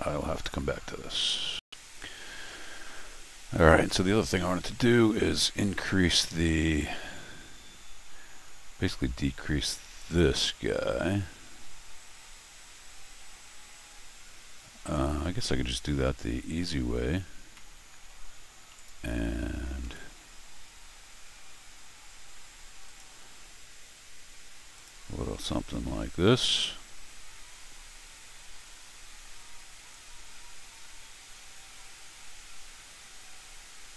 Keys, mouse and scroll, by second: 0.4 click, 1.5 click, 5.9 middle click, 6.6 middle click, 8.9 middle click, 10.0 click, 15.0 scroll down 1, 17.4 scroll up 1, 17.5 middle click, 18.8 click, 19.8 c, 22.9 click, 24.8 click, 26.4 alt+x, 27.6-28.1 scroll down 4, 27.7-33.9 right drag, 29.9-33.9 drag.